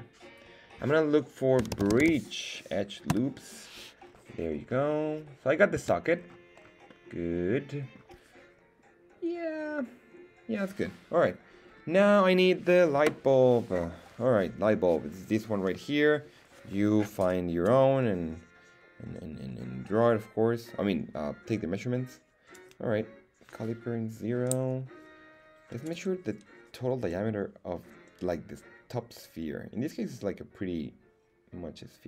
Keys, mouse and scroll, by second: 4.0-4.9 scroll down 4, 4.9 middle click, 5.8 Tab, 6.1 scroll down 2, 6.6 scroll up 1, 6.9-8.0 middle drag, 11.6-12.3 scroll down 2.